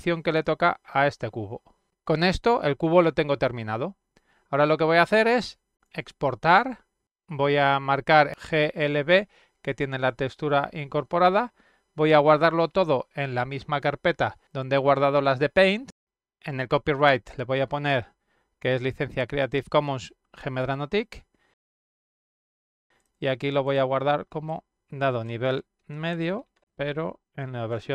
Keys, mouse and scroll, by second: 0.3 click, 1.0-2.0 middle drag, 4.2 click, 5.0 click, 9.6 click, 14.4 click, 14.6 click, 16.3 click, 16.8 click, 17.9 click, 18.8 click, 19.3 click, 20.0-20.9 typing, 22.1 click, 22.6 shift+c, 23.4 shift+a, 24.1 click, 25.5 shift+-.